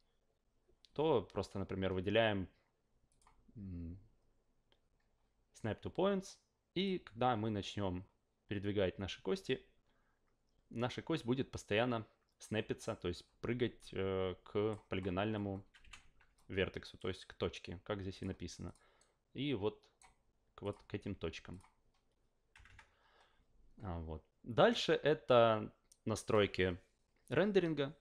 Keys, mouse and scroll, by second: 3.1 click, 6.8-14.7 drag, 15.0 scroll up 2, 15.4 scroll down 2, 15.8 f, 16.3-17.0 alt+drag, 18.1 click, 18.6 click, 19.0-20.0 right drag, 20.6 click, 21.5 click, 22.5 F8, 22.7 F8.